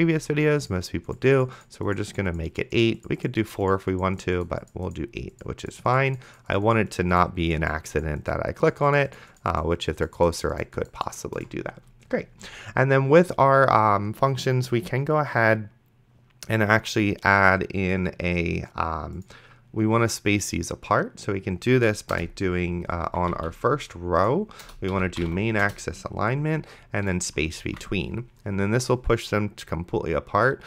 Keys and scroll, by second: 22.4 Return, 23.6 ctrl+z, 24.6 Return, 24.7-26.0 typing, 27.9 ctrl+s.